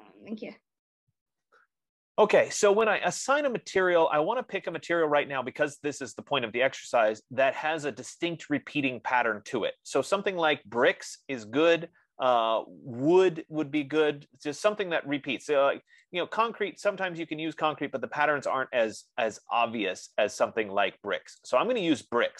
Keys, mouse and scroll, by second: 5.2-10.0 drag, 16.3-18.1 drag, 21.7 click.